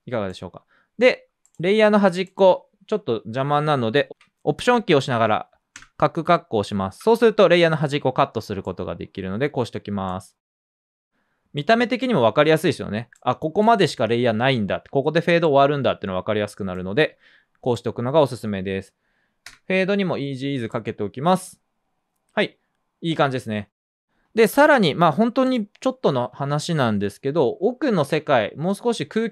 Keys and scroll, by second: 6.4 alt+], 19.4 F9.